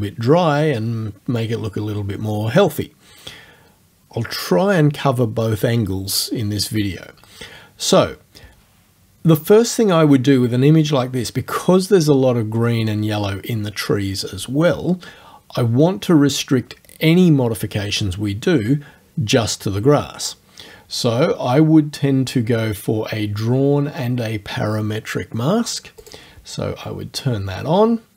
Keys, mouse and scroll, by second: 26.0 click, 27.4-28.1 scroll down 2.